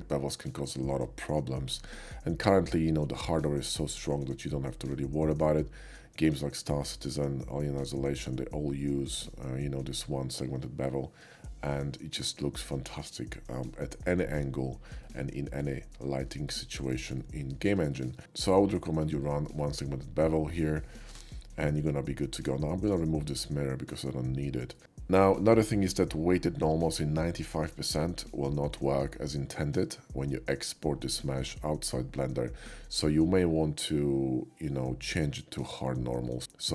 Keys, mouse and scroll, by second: 10.9-11.2 shift+middle drag, 15.0-15.6 middle drag, 15.9 shift+middle drag, 16.5-16.9 shift+middle drag, 17.2-17.5 shift+middle drag, 17.9 shift+middle drag, 19.2 shift+middle click, 22.9-24.7 drag, 24.7 middle click, 34.3 typing, 35.0 click, 35.5 typing.